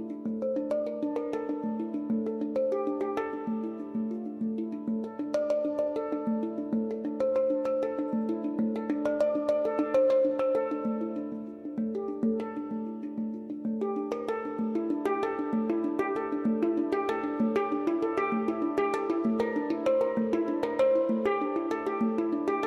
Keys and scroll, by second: 0.7-1.6 typing, 13.1-14.0 typing, 18.2 F3, 18.4 F2, 18.7 F4, 21.6 [.